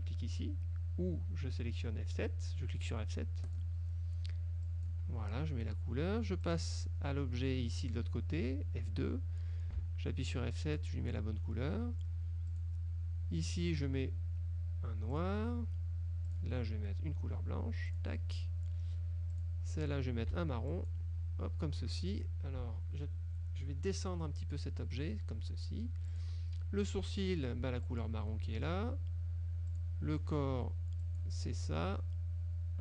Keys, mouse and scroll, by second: 3.6 click, 4.8 click, 5.9 F2, 6.6 click, 9.0 F2, 9.9 F7, 10.6 click, 11.3 click, 12.2 F2, 12.6 click, 15.2 click, 16.4 click, 18.0 click, 19.4 click, 20.4 F7, 20.8 click, 22.2 F1, 24.5 click, 26.2 click, 27.7 F7, 28.0 click, 28.9 F2, 29.8 click, 30.6 F7, 31.1 click, 31.8 F1.